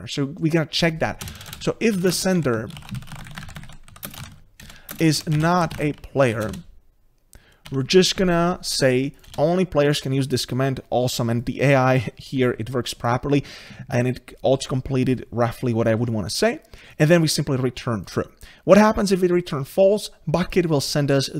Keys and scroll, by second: 3.9 Delete, 5.6 Return, 11.7 Tab.